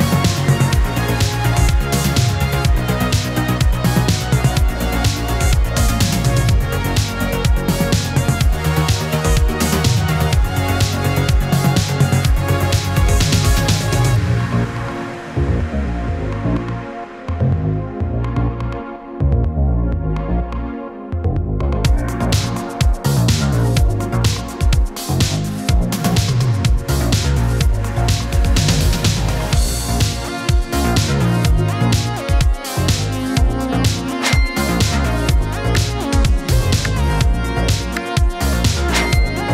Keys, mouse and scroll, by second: 2.3-3.0 click, 2.9 space, 5.4-9.4 drag, 9.7 scroll down 1, 10.5 click, 12.9 ctrl+space, 13.4-14.8 typing, 17.1 click, 19.0 typing, 20.3-20.7 scroll up 1, 20.7-21.4 middle drag, 23.6 click, 25.3 ctrl+c, 26.2 click, 27.1 ctrl+click, 27.8 click, 30.8 ctrl+v, 32.6 click, 33.9 ctrl+v, 35.0 click, 36.1 ctrl+x, 37.0 click, 37.5 ctrl+v, 38.3 click, 38.8-39.5 scroll down 1.